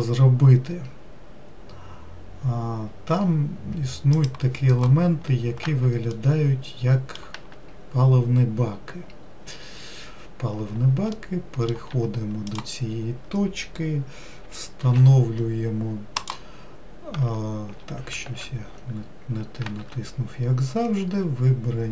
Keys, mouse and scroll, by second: 5.4-6.4 scroll down 2, 6.4-9.5 shift+middle drag, 10.3-11.4 scroll up 1, 11.4 middle click, 12.2 1, 12.8-15.1 drag, 15.1 shift+s, 18.5 ctrl+z, 19.9 shift+s.